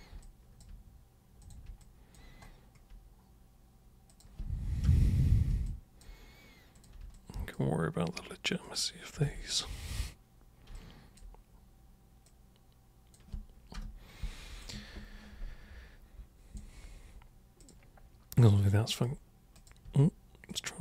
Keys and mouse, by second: 0.3 alt+super+click, 1.4 super+click, 1.8 alt+super+click, 4.1 super+click, 4.9 super+Return, 5.7 alt+super+click, 6.8 super+click, 7.1 alt+super+click, 8.7 super+click, 10.8 alt+super+click, 12.3 super+click, 13.7 super+Return, 14.6-16.6 alt+super+drag, 17.6 super+click, 18.5 super+right click, 19.6 super+click, 19.9 super+w, 20.5 super+click.